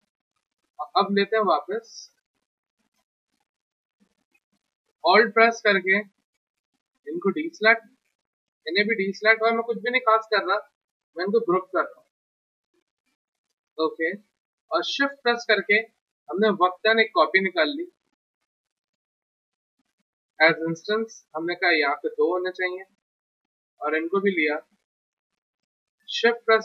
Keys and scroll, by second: 9.2 w.